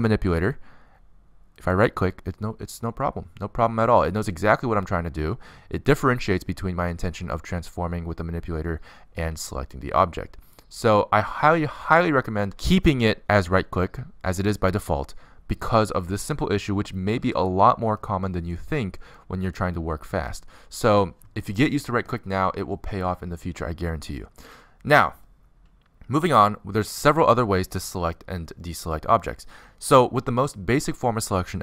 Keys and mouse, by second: 3.7-7.7 drag, 7.7-11.8 middle drag, 8.9 click, 12.6-15.0 middle drag, 16.1-17.5 middle drag, 19.7 z, 23.7 middle click, 25.7-31.6 middle drag.